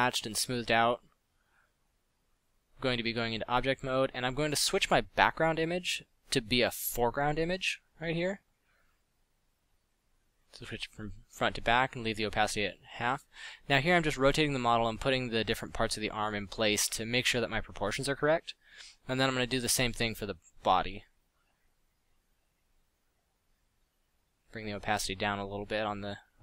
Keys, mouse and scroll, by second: 3.8 middle click, 4.1-7.1 typing, 12.2-14.3 typing, 15.6 r, 15.9 g, 18.4 alt+r, 19.0 alt+g, 24.4 middle click, 25.6-26.4 typing.